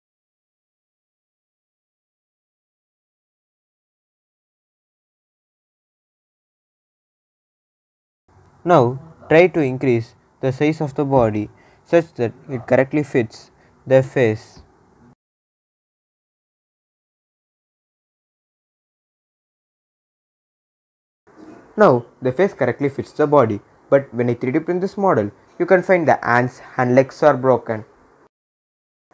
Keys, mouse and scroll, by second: 2.2 click, 7.1-9.2 drag, 9.2 scroll down 1, 10.9 s, 12.2 click, 12.6-13.9 scroll down 1, 13.9-15.5 drag, 16.3-18.7 drag, 18.7 s, 19.4 click, 21.1-22.1 scroll down 1, 22.1 click, 22.2-24.1 drag, 24.1-24.7 scroll up 2, 27.7-28.0 scroll down 1, 28.3-29.1 drag.